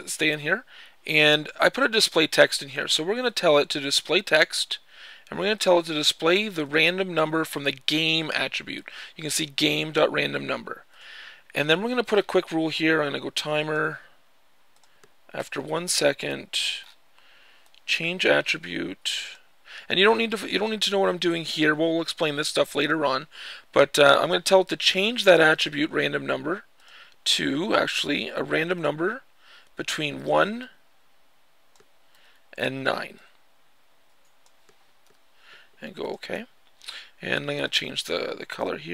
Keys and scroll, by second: 15.1 1, 31.8 1, 34.7 9.